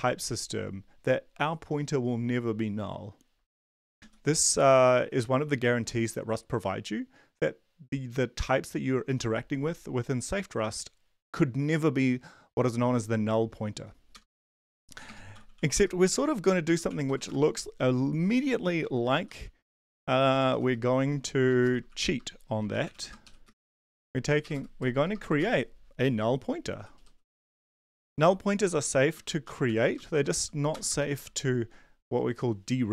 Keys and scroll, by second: 3.6 Down, 3.8 Down, 4.0 Down, 14.1 Return, 14.6 Tab, 15.0 Return, 15.1-30.9 typing, 31.1 Up, 31.5 Down.